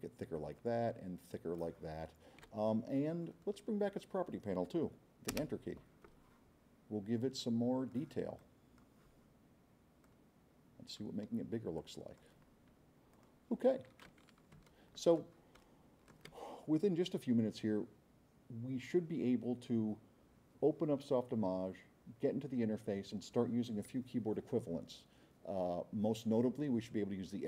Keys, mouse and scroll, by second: 0.2-1.6 drag, 5.3 Return, 7.4-7.9 drag, 8.4-8.9 drag, 10.0-11.2 drag, 11.8 click, 13.1 click, 14.5 s, 14.7-15.2 right drag, 15.6 right click.